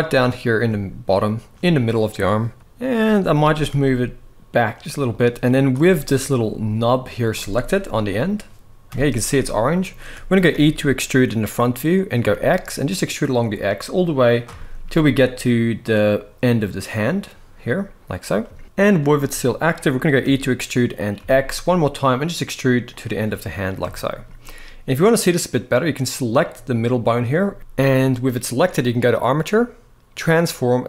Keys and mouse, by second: 3.1 g, 5.7 middle click, 6.7 click, 8.6 KP_1, 9.5 shift+middle click, 10.2 e, 14.3 shift+middle click, 18.4 shift+middle drag, 19.9 e, 23.6-23.9 shift+middle drag, 25.5 click, 26.4-26.9 middle drag, 28.8-30.8 drag.